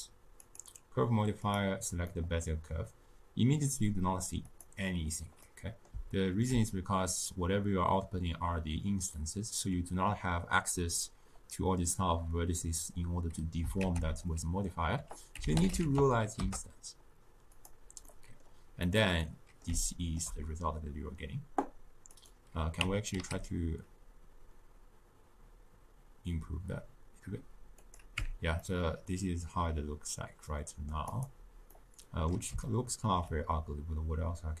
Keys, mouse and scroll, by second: 1.9 scroll up 2, 2.0-4.4 middle drag, 4.4-16.4 drag, 16.4 ctrl+a, 18.8-22.2 middle drag, 22.2 click, 22.8 Tab, 23.1 s, 28.1 Tab, 28.5-31.1 middle drag, 31.1 click, 31.6-34.6 middle drag.